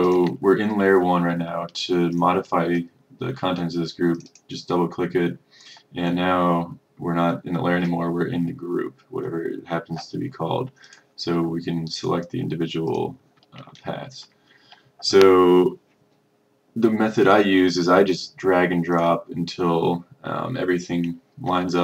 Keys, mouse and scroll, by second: 13.8-14.2 ctrl+scroll, 19.0-21.8 drag.